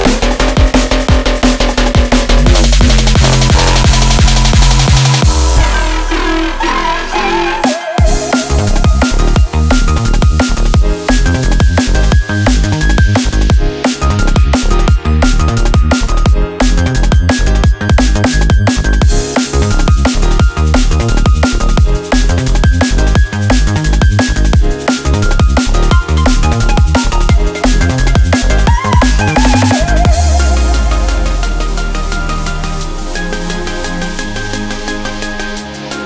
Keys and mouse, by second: 4.9 click, 5.7 click, 6.4 click, 7.2 click, 7.8 click, 8.2 Tab, 11.2 click, 23.3 Tab, 24.8 3, 25.4 shift+click, 27.9-28.4 drag, 30.9 click, 31.3 click, 31.8 click, 34.4 click, 34.9 click.